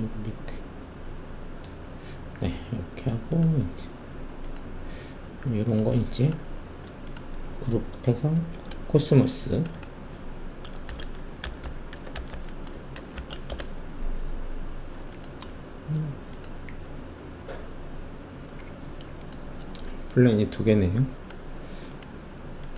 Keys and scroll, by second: 8.3 ctrl+g, 10.8-13.1 typing, 13.4 Return.